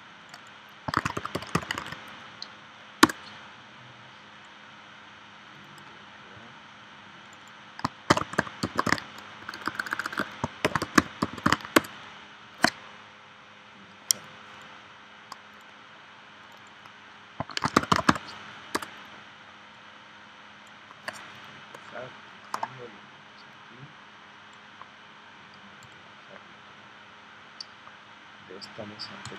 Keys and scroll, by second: 0.7-2.2 typing, 3.0 Return, 8.4-11.4 typing, 11.7 Return, 17.4-18.2 typing, 18.7 Return.